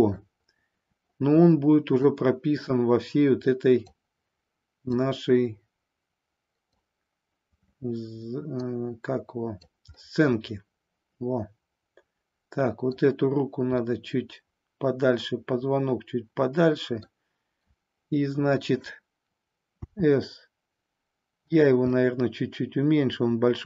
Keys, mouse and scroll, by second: 2.0-3.8 drag, 4.9-6.8 drag, 8.6-9.7 drag, 9.9 scroll up 1, 10.2-12.9 middle drag, 13.7 scroll up 1, 13.9-17.1 middle drag, 19.7 s, 21.5 click, 21.8-23.6 middle drag.